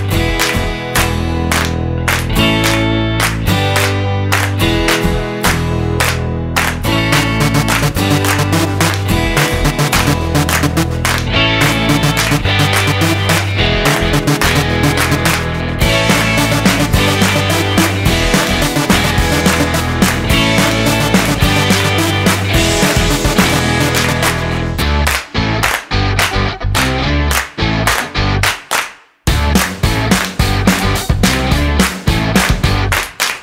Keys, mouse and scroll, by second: 2.3 click, 5.8 click, 11.1 click, 20.1 middle click, 20.5-20.8 scroll down 3, 20.8 middle click, 21.7 click, 23.1 click, 25.4 ctrl+t, 27.3 click, 28.1 click, 29.7 middle click, 30.4-32.9 scroll up 9.